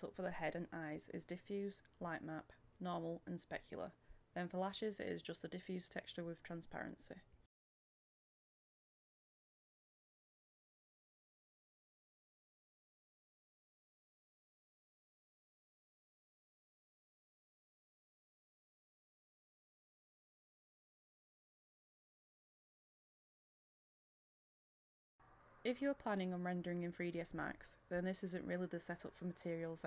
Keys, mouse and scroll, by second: 4.3 Return, 5.5 click, 7.2 Return, 8.4 click, 10.0 Return, 12.8 click, 16.2 Return, 19.5 click, 22.6 Return, 23.9-25.0 middle drag, 25.1 click, 25.6 right click, 25.9 click, 26.1 middle click, 26.2 scroll up 1, 26.6 click, 27.4 Return, 27.7 click, 29.4 middle click, 29.8 click.